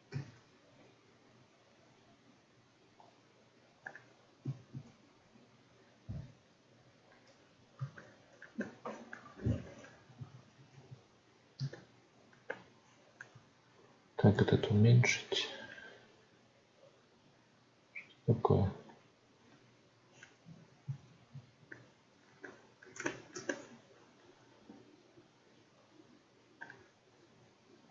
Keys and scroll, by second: 0.0 shift+f, 4.7 shift+f, 10.1 ctrl+z, 20.8 ctrl+z.